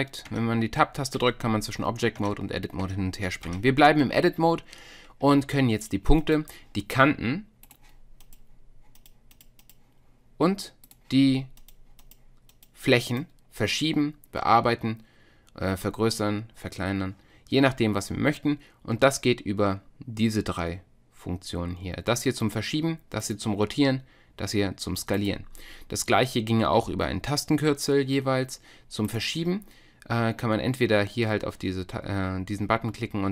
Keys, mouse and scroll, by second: 0.3 Tab, 1.2 Tab, 2.2 Tab, 2.8 Tab, 3.5 Tab, 5.8 click, 7.0 click, 7.9 click, 9.3-10.9 drag, 11.3 click, 14.7-27.0 drag, 29.1-33.3 drag.